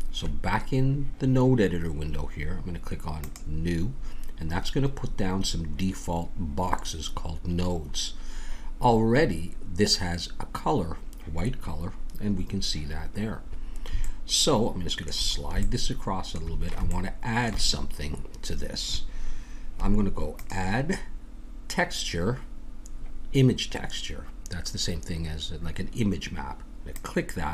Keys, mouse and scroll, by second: 3.1-5.0 drag, 4.6-9.4 middle drag, 14.1-19.0 middle drag, 20.3-22.4 drag.